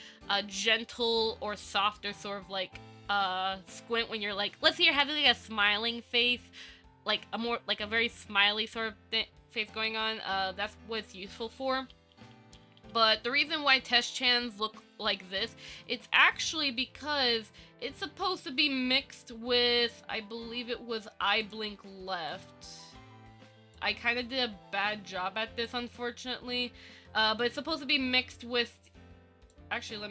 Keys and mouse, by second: 0.7 ctrl+z, 11.7 ctrl+z, 12.1 ctrl+z, 12.7 ctrl+z, 13.0 ctrl+z, 13.4 ctrl+z, 15.3 Tab, 22.5-23.9 drag, 26.0-29.7 drag.